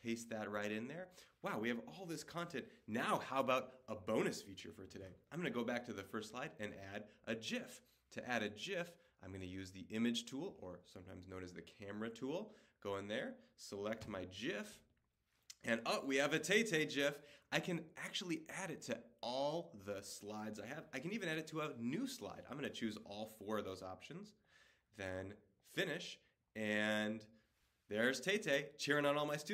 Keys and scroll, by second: 4.9 Left.